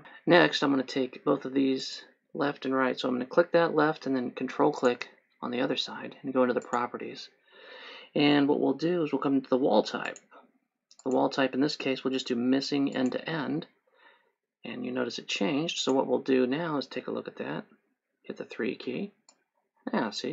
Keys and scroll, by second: 0.0 Escape, 19.1 3.